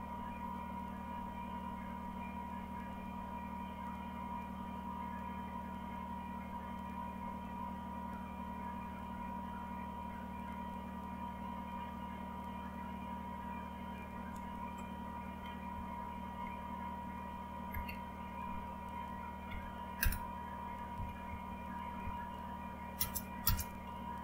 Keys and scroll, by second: 0.0-0.2 typing, 15.4-16.1 typing, 16.2 Down, 17.7 Down, 19.4 Down, 20.0 Return, 20.7-24.2 typing.